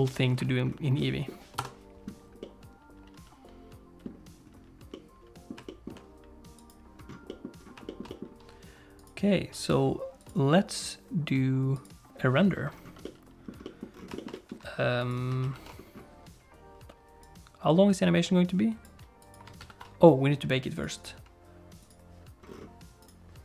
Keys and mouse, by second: 0.0 ctrl+space, 1.1 click, 1.5 KP_0, 2.4-3.9 drag, 3.9 middle click, 4.9 middle click, 5.6 shift+middle click, 6.5 click, 7.2 middle click, 7.8 shift+middle click, 8.0 middle click, 11.7 click, 13.0 middle click, 13.6 middle click, 14.1 shift+middle click, 14.3 middle click, 15.1 click, 15.4 ctrl+s, 17.2-18.8 drag, 19.2 click, 19.6 ctrl+s, 20.7 click, 21.0 click, 23.0-23.4 drag.